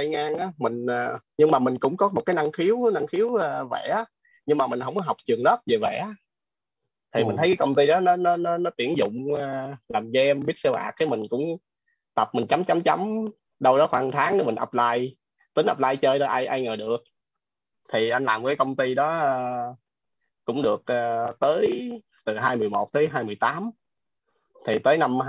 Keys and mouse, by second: 1.6-4.8 typing, 18.1 click, 24.0 click.